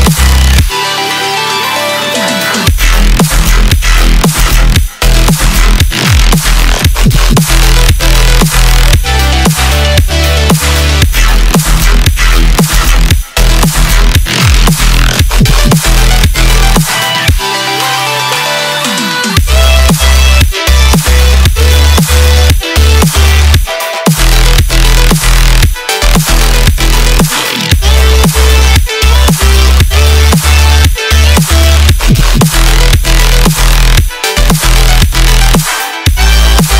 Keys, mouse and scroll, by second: 2.1 click, 3.2 space, 8.3 space, 9.3-12.3 drag, 13.5-16.2 drag, 16.2 scroll down 1, 16.8-17.8 middle drag, 17.8-18.3 scroll down 1, 18.3-20.5 shift+middle drag, 20.5-20.9 scroll down 1, 20.9-22.9 middle drag, 22.9 space, 28.7 space, 29.7-32.7 drag, 33.1-36.2 drag, 36.5-36.7 drag.